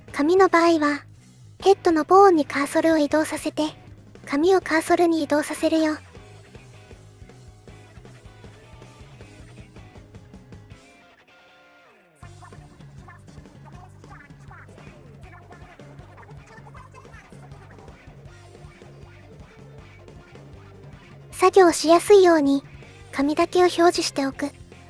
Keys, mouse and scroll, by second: 0.1 shift+s, 3.7 middle click, 6.6 shift+click, 11.4-12.5 drag, 14.3 middle click, 15.8 shift+s, 19.3-21.1 middle drag, 21.6 shift+middle click, 22.0-23.4 middle drag.